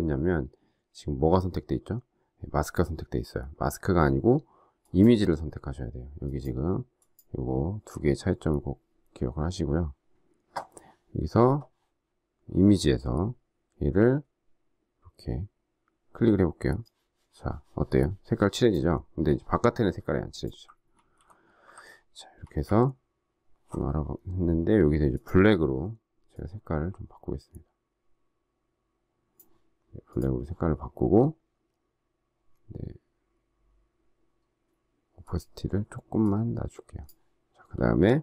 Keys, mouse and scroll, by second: 20.9 ctrl+z, 22.4 ctrl+alt+z, 38.1 alt+scroll down 1.